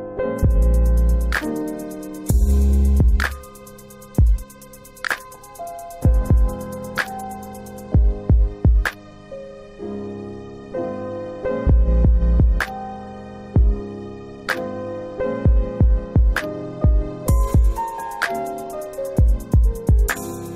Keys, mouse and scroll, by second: 0.6 middle click, 0.7 scroll up 1, 1.7 middle click, 2.4 middle click, 9.7 middle click, 10.5-11.3 scroll up 2, 13.5 right click, 17.3 click.